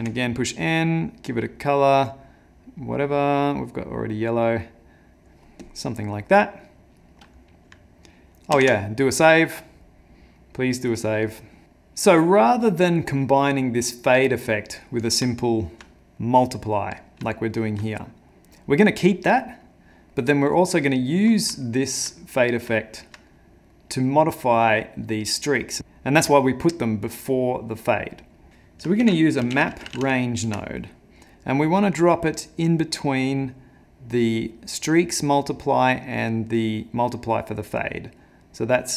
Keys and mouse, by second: 0.0 n, 1.2 click, 1.7 click, 5.6 click, 6.2 middle click, 7.1 middle click, 8.6 ctrl+s, 10.4 middle click, 11.1 middle click, 11.7 middle click, 12.7 middle click, 14.5 middle click, 15.3 ctrl+middle click, 15.5 ctrl+middle click, 16.0 middle click, 17.4 ctrl+middle click, 17.9 middle click, 19.6 middle click, 19.8 ctrl+middle click, 20.5 middle click, 21.0 middle click, 21.7 ctrl+middle click, 21.9 ctrl+middle click, 23.3 middle click, 24.4 middle click, 24.6 ctrl+middle click, 27.7 middle click, 28.4 middle click, 28.5 ctrl+z, 29.0 ctrl+shift+a.